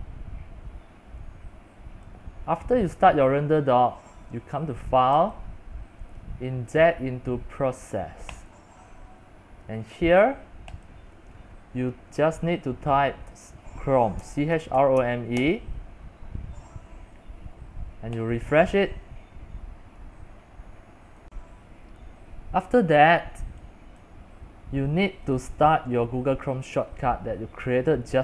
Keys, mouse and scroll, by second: 0.0-2.7 drag, 2.8-13.3 drag, 13.3-15.9 typing, 18.4-28.2 drag.